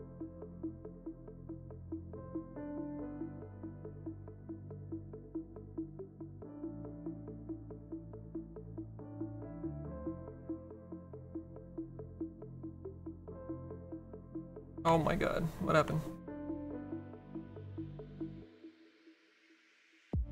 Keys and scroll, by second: 2.8 s, 7.5 s.